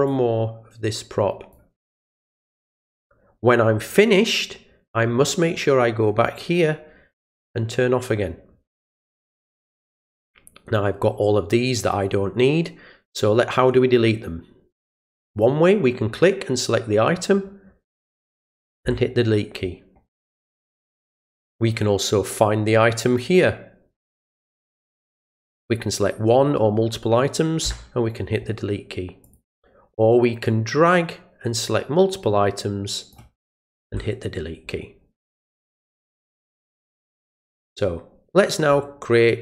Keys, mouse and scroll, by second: 0.1-1.5 drag, 2.1-3.9 drag, 7.3 click, 15.3 click, 20.6 click, 23.0 click, 29.2 click, 30.5-33.1 drag, 35.5 click.